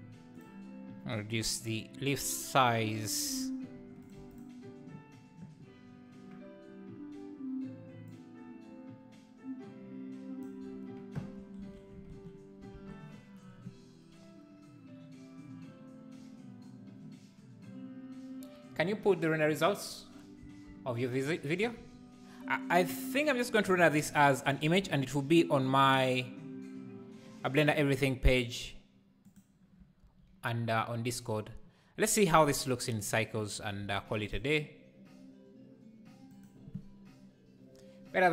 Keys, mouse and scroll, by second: 1.6 click, 3.0-4.1 scroll down 4, 4.5 click, 8.4-11.2 drag, 11.8 ctrl+s, 12.2 alt+a, 13.0 ctrl+s, 28.0 ctrl+s.